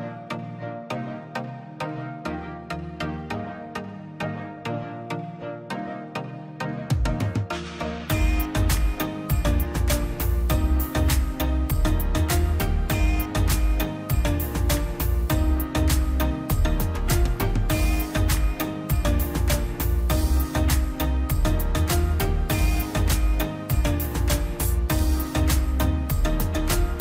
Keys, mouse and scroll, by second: 3.0 click, 3.6 middle click, 4.6 click, 5.8-6.2 scroll down 1, 6.3 middle click, 7.3 ctrl+z, 7.3 middle click, 8.3-11.7 middle drag, 11.7 click, 12.9 click, 13.2 scroll up 1, 13.6 middle click, 13.9 scroll up 1, 14.2-15.4 drag, 15.4 scroll up 1, 16.5 scroll down 1, 17.1 middle click, 18.0 click, 18.5 scroll down 1, 18.8 middle click, 19.1-19.6 scroll down 1, 19.6 middle click, 20.1 click, 21.4 middle click, 21.6 scroll up 1, 22.1 middle click, 22.4 click, 22.9 scroll down 1, 24.3 middle click, 25.0 scroll up 1, 25.8 click, 26.0 scroll up 1.